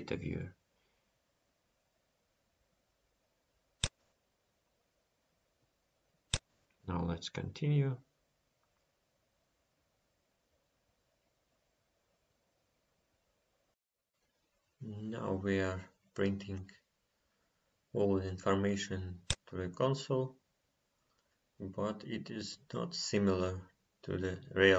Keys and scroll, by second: 8.1 F5.